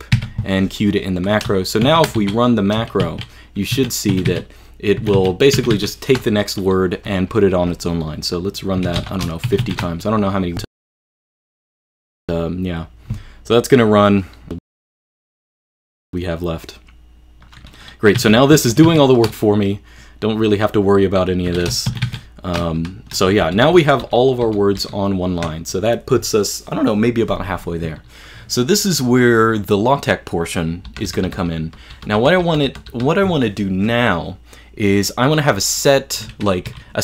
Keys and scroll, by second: 0.2 q, 1.9-6.3 typing, 8.7-10.1 typing, 14.7-16.2 typing, 18.0-19.5 typing, 21.3-22.6 typing, 23.4 ctrl+u, 23.7 ctrl+u, 23.8-24.6 typing, 24.8 ctrl+u, 30.9-32.7 typing, 36.7 super+Page_Down.